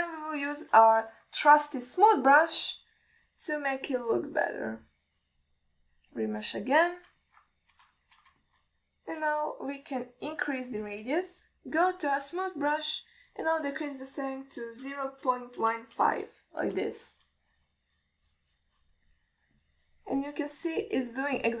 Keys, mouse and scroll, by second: 0.8 alt+middle drag, 1.2 click, 2.2 alt+shift+middle click, 2.7 alt+middle drag, 3.3 click, 3.9 middle drag, 4.5 click, 5.2 alt+middle click, 5.7 alt+middle click, 6.1 click, 7.0 click, 7.4-8.3 drag, 8.5 ctrl+alt+middle click, 8.8 middle click, 9.3 alt+shift+middle click, 9.7 ctrl+alt+middle click, 10.5 f, 11.5 f, 12.0 alt+middle click, 13.0 click, 14.6-17.5 drag, 18.3 alt+shift+middle click, 18.8-20.2 drag, 20.3 alt+middle click, 20.8 click.